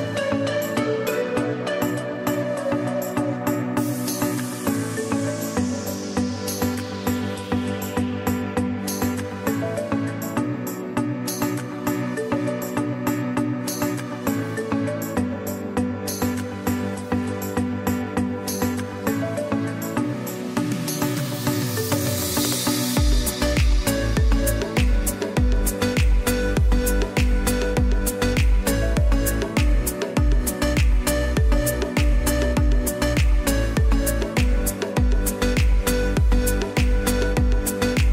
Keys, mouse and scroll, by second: 0.4 space, 0.9 click, 1.5 space, 1.8 click, 2.2 space, 4.1 click, 4.3 space, 4.6 click, 5.1 space, 5.6 click, 6.4-7.1 typing, 6.6 click, 8.7 click, 9.3-14.8 typing, 10.0 click, 11.1 click, 11.7 click, 12.5 click, 13.1 click, 13.9 click, 14.2 click, 16.6 o, 19.5 click, 20.4 typing, 21.1 click, 22.3-22.9 typing, 23.9 click, 24.7-25.1 typing, 24.9 click, 28.2 click, 28.8 space, 29.1 click, 29.5 space, 30.8 z, 31.0 click, 33.3 space, 33.5 click, 34.0 space, 36.6 ctrl+shift+a.